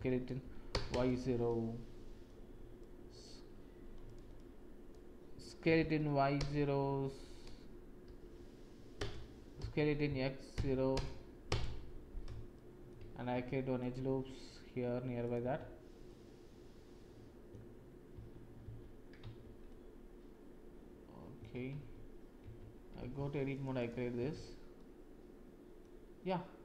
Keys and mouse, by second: 1.7 middle click, 2.8 click, 4.0 click, 4.4 click, 5.6 s, 9.5 s, 12.5 shift+click, 13.3 ctrl+r, 15.6 Tab, 16.0-17.5 drag, 18.1 ctrl+z, 19.4 Tab, 19.6-21.4 drag, 22.4 Tab, 23.1 ctrl+r, 24.3 Tab, 24.7 click, 26.3 click.